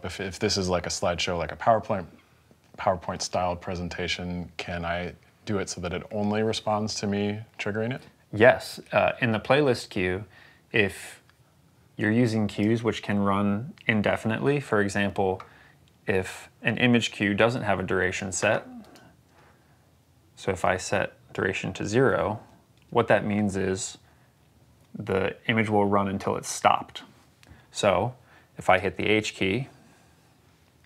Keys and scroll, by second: 22.2 0, 22.6 Return, 29.1 h.